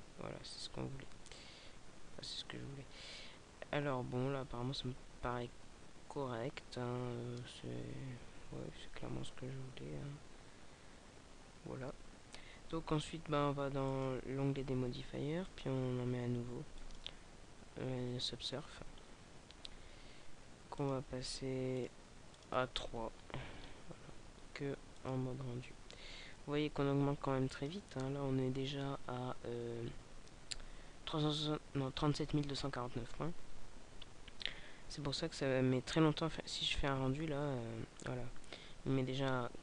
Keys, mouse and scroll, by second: 23.0-23.6 scroll up 3, 24.2 scroll up 2, 24.9 click, 27.6 click, 33.6-35.1 scroll down 6, 35.1-35.8 scroll up 2.